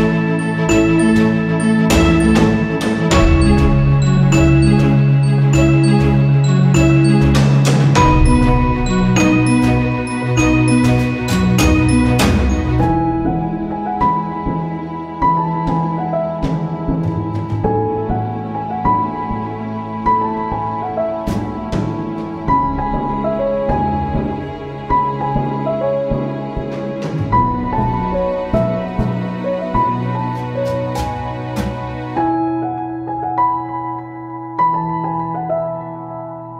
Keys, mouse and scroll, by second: 0.9-8.9 drag, 10.8 click, 15.6 click, 19.9-25.0 drag, 25.3 click, 27.5 click, 27.7 right click, 29.0 click, 30.3 shift+click, 31.1-36.5 shift+drag.